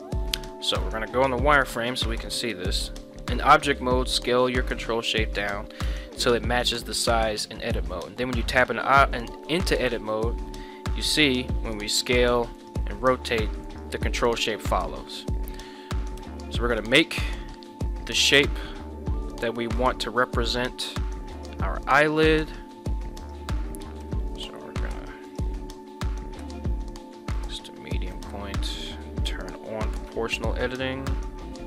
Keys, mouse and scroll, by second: 0.8 z, 2.5 s, 5.4 click, 5.8 Tab, 9.9 1, 11.4 s, 12.6 right click, 13.0 r, 13.7 right click, 15.1 middle click, 16.1 KP_1, 17.1 shift+middle click, 18.0 s, 18.2 z, 19.8 click, 20.4 right click, 21.3 shift+right click, 22.2 s, 22.4 x, 23.2 right click, 24.0 ,, 26.4 ., 28.1-30.3 typing, 28.7 right click.